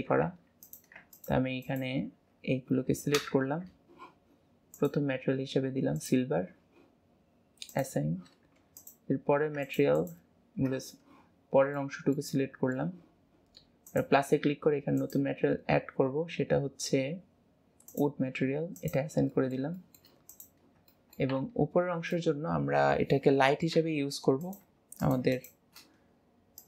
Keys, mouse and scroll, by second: 0.7 click, 1.2 click, 1.7 click, 4.8-9.0 drag, 9.7 click, 10.0 click, 11.8-13.9 middle drag, 13.9-18.1 drag, 18.9 click, 19.4-21.5 middle drag, 22.2-23.9 middle drag, 24.4 click, 25.1 click, 25.4 click.